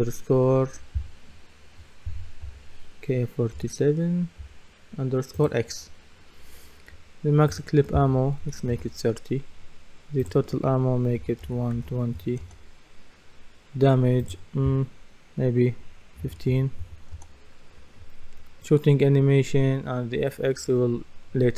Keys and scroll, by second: 2.4 BackSpace, 8.4 KP_3, 11.2 KP_1, 12.4 Return, 16.2 KP_1, 16.5 KP_5, 17.1 Return.